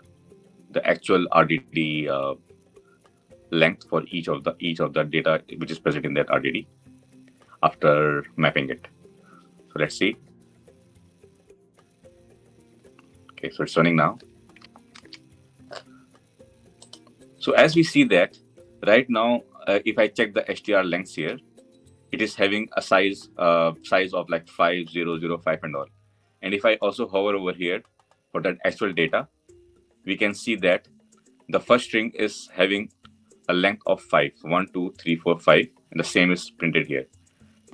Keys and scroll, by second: 14.8 alt+F8.